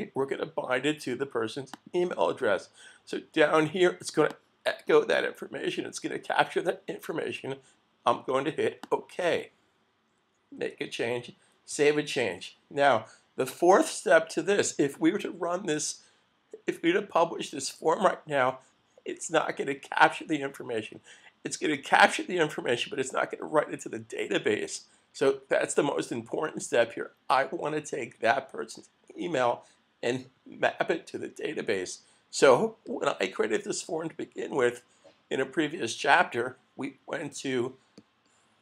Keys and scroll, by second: 11.7 super+s.